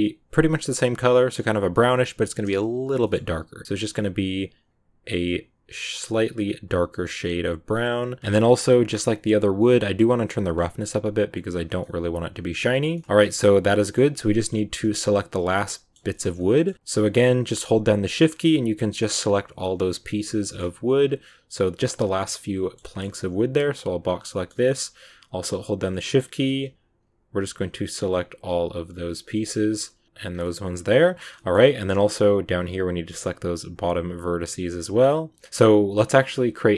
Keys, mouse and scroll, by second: 2.9 middle click, 3.6 click, 8.2 scroll up 1, 8.2-8.8 scroll down 6, 10.3-11.7 drag, 11.7 middle click, 12.6 Tab, 12.8 scroll up 1, 12.8-14.0 middle drag, 14.0 a, 14.1-16.6 middle drag, 16.6 scroll up 1, 16.7 middle click, 16.9 shift+right click, 17.2 shift+right click, 18.1 shift+right click, 18.9 shift+right click, 19.8 shift+right click, 20.1 shift+right click, 20.3 middle click, 20.7 b, 21.9-23.0 middle drag, 23.0 b, 24.2 middle click, 24.8 shift+right click, 25.1 shift+right click, 25.7 shift+right click, 25.8-27.2 middle drag, 27.2 shift+right click, 27.5 shift+right click, 28.0 shift+right click, 28.4 shift+right click, 29.0 shift+right click, 29.2 middle click, 29.9 b, 30.2 scroll down 2, 30.3-31.4 middle drag, 31.4 scroll up 2, 31.7 middle click, 32.4 shift+right click, 33.2 shift+right click, 33.5 shift+right click, 33.9-35.2 shift+right drag, 35.3 scroll down 1.